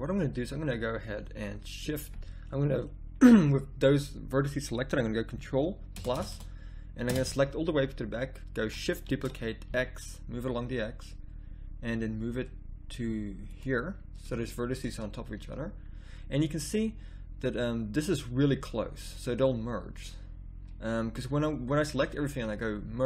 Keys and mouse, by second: 0.9 middle click, 5.9 ctrl+KP_Add, 6.1 ctrl+KP_Add, 6.3 ctrl+KP_Add, 7.1 ctrl+KP_Add, 9.0 shift+d, 13.8 middle click, 14.6 middle click, 15.9 middle click, 17.9-19.1 middle drag, 20.2 middle click, 20.9 middle click, 22.6-23.0 middle drag.